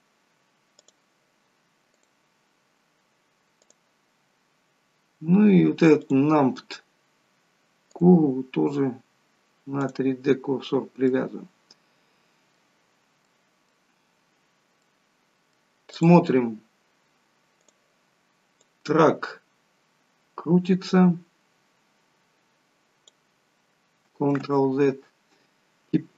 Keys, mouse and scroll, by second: 0.0 scroll up 4, 0.8 click, 3.8 click, 6.1 click, 10.0 click, 10.6-11.3 scroll down 4, 12.9-13.5 scroll down 2, 13.3 middle click, 14.5-14.9 scroll up 2, 14.9 middle click, 16.1 click, 17.9 click, 24.6 ctrl+z.